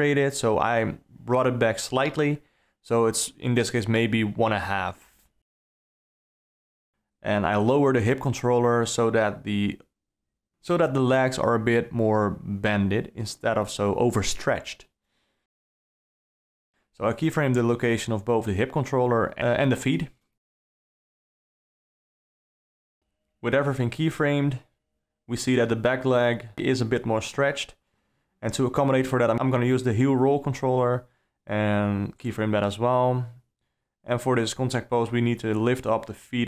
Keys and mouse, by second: 1.8 click, 2.9 g, 6.7 click, 7.7 g, 15.4 alt+a, 15.4 click, 16.6 shift+click, 17.2 i, 19.0 alt+a, 20.0 shift+click, 20.6 i, 22.3 a, 22.8 i, 24.3 click, 24.6 g, 26.2 click, 27.6 i, 28.2-29.9 drag, 30.1 click, 30.8 g, 32.5 drag, 33.0 g, 34.9 g.